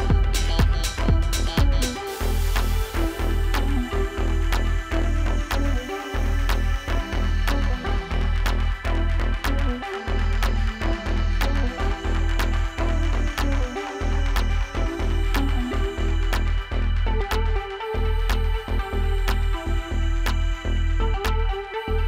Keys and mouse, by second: 1.5-5.1 typing, 3.5 click, 5.4 click, 6.0 click, 7.2 click, 8.6 alt+click, 9.0-10.6 typing, 10.0 click, 11.4 ctrl+z, 12.8 click, 13.1 typing, 13.8 ctrl+=, 16.0 z, 18.2 click.